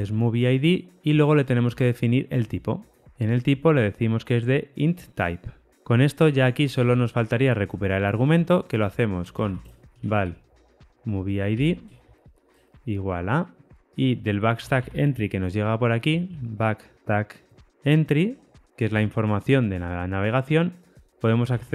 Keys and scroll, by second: 1.6 Tab, 18.8 Tab.